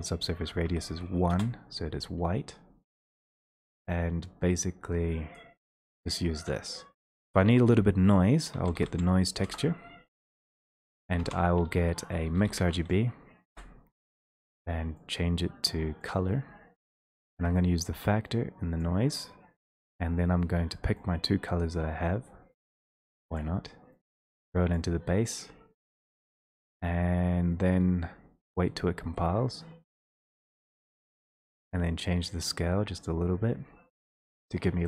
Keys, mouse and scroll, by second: 0.3 click, 0.6 1, 1.5 Return, 5.3 click, 6.5 middle click, 6.5-7.0 scroll up 1, 7.1 alt+space, 8.5-8.9 typing, 9.4 Return, 10.6 click, 10.6 typing, 11.1 click, 11.3 alt+space, 11.9-12.8 typing, 13.5 Return, 14.3 click, 15.2 click, 16.2 click, 18.8 click.